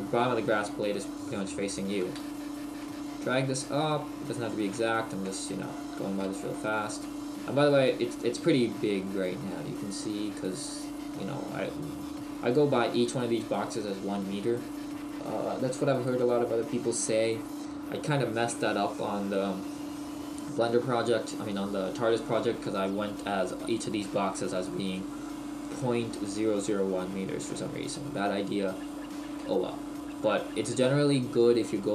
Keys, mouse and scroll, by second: 1.7 click, 5.0 shift+middle click, 5.3-5.6 scroll down 1, 6.6 shift+middle click, 6.6-7.3 scroll down 5.